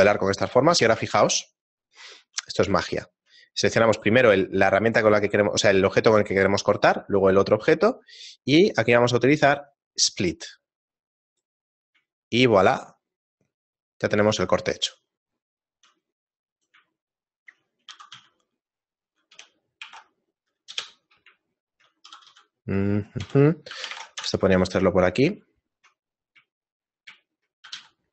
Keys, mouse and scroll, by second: 0.6 right click, 1.6 shift+right click, 2.0 shift+middle click, 2.4 middle click, 2.8 shift+middle click, 3.9 right click, 6.7 shift+right click, 12.2 shift+middle click, 16.6 right click, 16.9 shift+middle click, 17.9 r, 21.5 shift+middle click, 22.1 r, 25.3 shift+middle click, 26.3 middle click, 26.6 shift+middle click, 27.2 shift+middle click, 27.6 g.